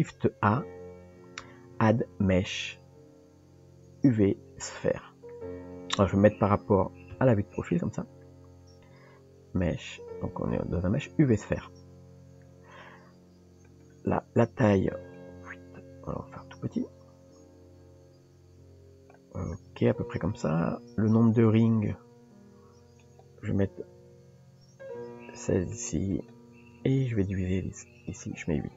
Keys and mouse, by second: 7.1 KP_3, 8.5 shift+a, 15.1-19.2 drag, 23.1-28.7 drag.